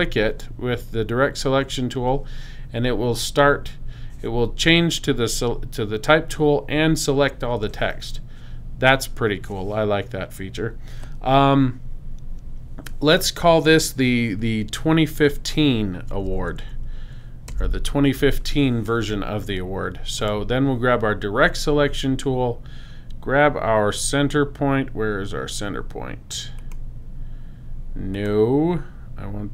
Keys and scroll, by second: 16.0-16.7 typing, 18.2 5.